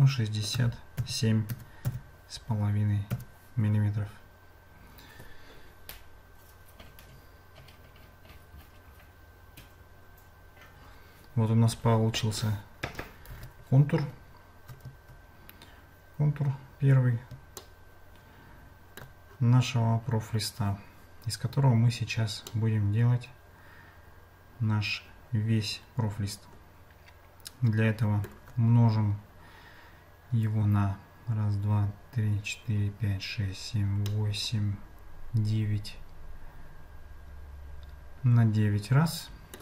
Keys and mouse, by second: 13.3 Tab, 17.6-19.1 shift+middle drag, 22.5-28.2 shift+middle drag, 34.3-39.6 middle drag.